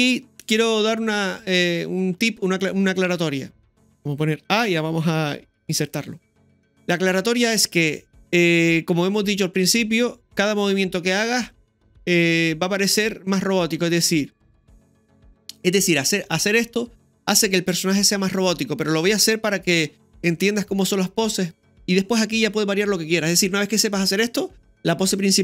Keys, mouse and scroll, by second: 4.4 a, 6.4-6.9 scroll up 1, 6.9 scroll down 1, 10.7-11.5 scroll down 1.